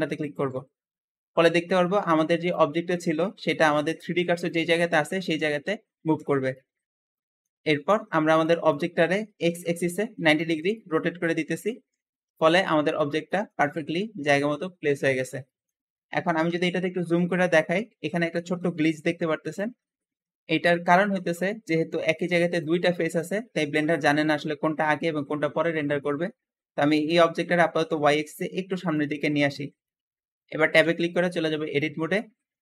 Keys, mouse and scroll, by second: 1.5 `, 6.3 Escape, 6.7-7.0 scroll up 3, 7.0-9.1 shift+middle drag, 9.1-9.7 typing, 10.4 Return, 10.4 Return, 11.8 r, 12.0 KP_1, 12.1 KP_1, 13.2 shift+middle click, 13.5-14.0 scroll up 4, 15.2-16.3 shift+middle drag, 16.3 shift+KP_Decimal, 17.0-17.5 scroll up 2, 17.5-23.4 middle drag, 23.4 Escape, 23.6-26.6 middle drag, 25.5 Escape, 27.4 click, 29.7 middle click, 30.6 Tab, 31.3-32.6 middle drag.